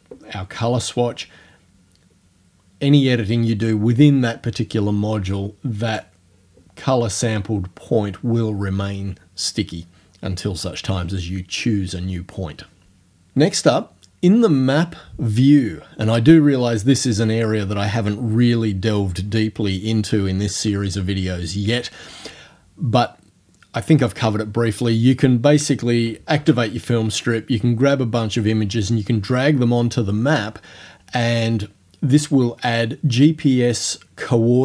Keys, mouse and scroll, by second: 5.9 click, 26.4 ctrl+f.